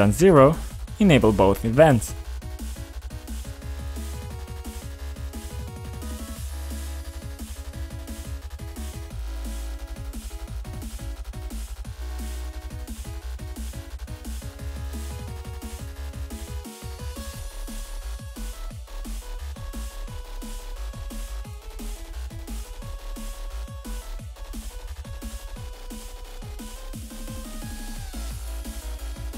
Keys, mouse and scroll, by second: 0.7 scroll down 1, 1.3 click, 1.6-1.9 scroll down 1, 6.5 click, 7.4 click, 7.5 click, 8.6 click, 10.3 click, 11.1 2, 11.3 Return, 12.4 click, 12.5 click, 12.5 double click, 13.2 double click, 14.2 typing, 14.5 Return, 15.5 click, 15.7 click, 16.4 click, 18.9 typing, 19.2 Return, 20.7 click, 20.8 click, 20.9 double click, 22.3 click, 25.1 click, 25.8 click, 26.7 click, 28.2 click, 28.9 click.